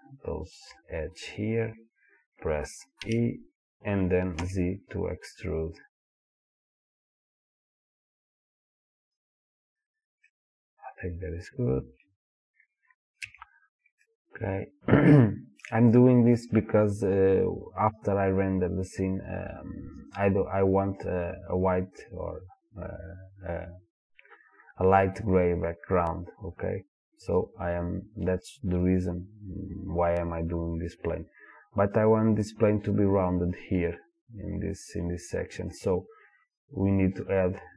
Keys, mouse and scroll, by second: 3.0 e, 9.4 click, 10.3-36.5 middle drag, 13.3 Tab, 36.5 click, 37.4-37.7 drag.